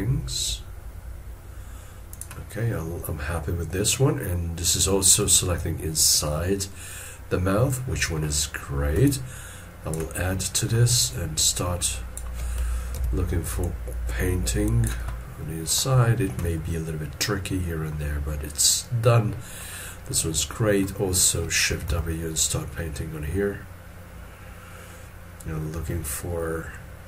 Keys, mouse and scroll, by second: 2.7 middle click, 9.0 ctrl+click, 10.3 middle click, 11.5 ctrl+click, 13.0 ctrl+z, 13.6 ctrl+click, 15.2 middle click, 16.7 middle click, 21.7 scroll down 1, 21.9 shift+w.